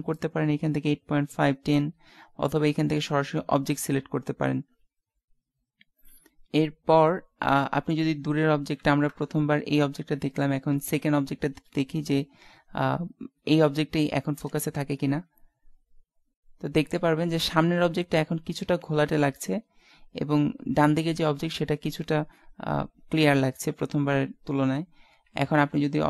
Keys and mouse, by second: 9.2 KP_0, 14.6 shift+z, 25.6 z, 25.7 z.